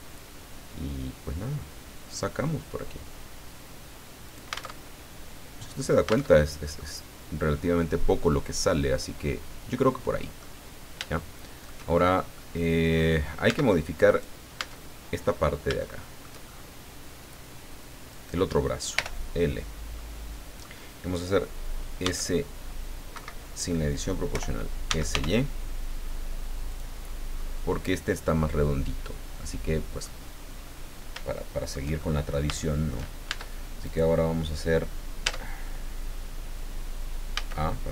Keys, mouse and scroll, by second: 4.2 alt+click, 4.7 alt+Tab, 6.3 alt+Tab, 6.4 scroll down 2, 6.7 alt+middle click, 6.8-10.6 drag, 10.8 scroll down 2, 11.1 shift+click, 12.3 click, 13.5 Tab, 14.0 middle click, 14.5 Tab, 15.2-15.6 scroll up 1, 15.8 shift+click, 16.1-16.7 shift+scroll up 3, 18.1 middle click, 18.9 l, 19.6 scroll down 2, 19.9 middle click, 22.0 s, 23.1 Escape, 24.3-25.6 typing, 26.7 click, 27.4-28.6 middle drag, 28.6-30.2 drag, 30.6-30.9 scroll up 1, 31.3 shift+middle click, 32.0 shift+middle click, 32.6 shift+middle click, 33.2 shift+Tab, 33.8 shift+right click, 35.2 Tab, 37.3 a, 37.7-37.9 scroll down 1.